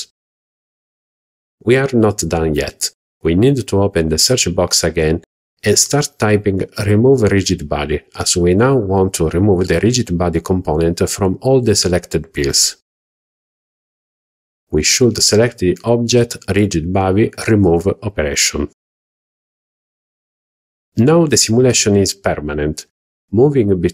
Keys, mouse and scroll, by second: 17.4 click, 20.0 click.